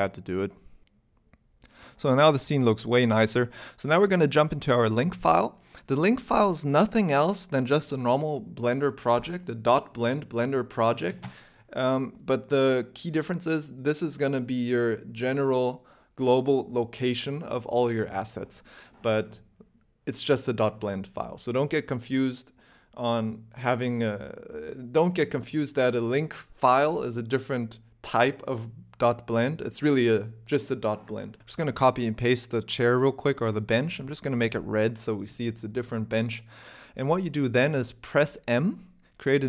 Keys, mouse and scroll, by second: 2.3 alt+3, 2.3 alt+click, 2.9 e, 3.3 s, 4.6 Tab, 4.6-5.8 scroll down 13, 5.1 shift+middle click, 5.8 ctrl+s.